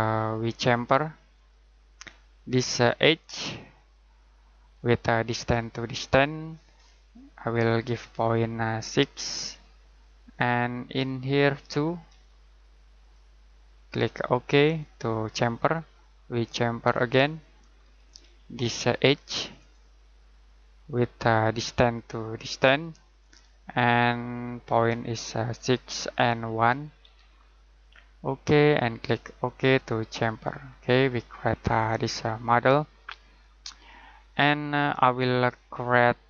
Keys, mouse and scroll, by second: 0.4 click, 2.0-3.3 scroll down 1, 3.3 click, 9.1 6, 10.3 click, 12.1 2, 13.0 click, 27.0 1, 27.8 click, 30.6 scroll down 1, 30.8-31.7 scroll up 1, 35.2-36.2 scroll down 1.